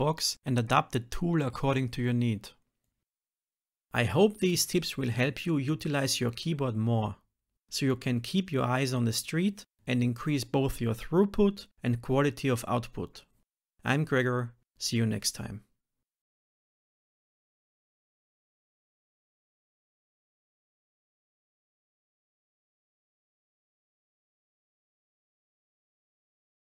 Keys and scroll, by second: 0.4 Return, 1.2 F6, 2.9 ctrl+alt+n, 6.6 shift+F10, 8.8 shift+F6, 12.3 ctrl+s, 15.9 Return, 16.4 shift+F10.